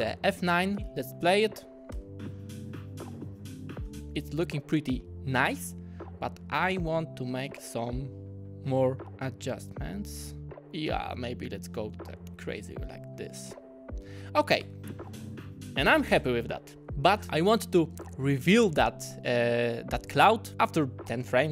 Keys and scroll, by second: 0.3 F9, 1.9 space, 14.6 space.